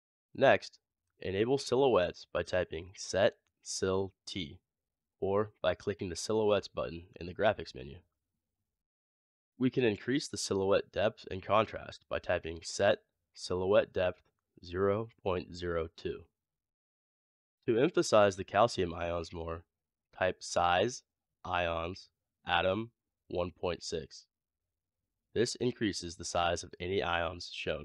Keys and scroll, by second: 1.7 typing, 7.3-8.0 typing, 12.6 typing, 17.4 typing, 20.4-20.8 typing, 25.2 typing.